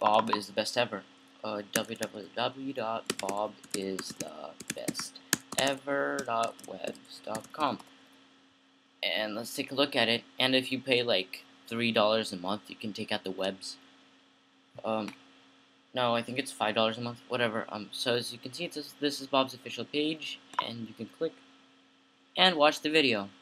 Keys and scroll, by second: 1.7-8.3 typing.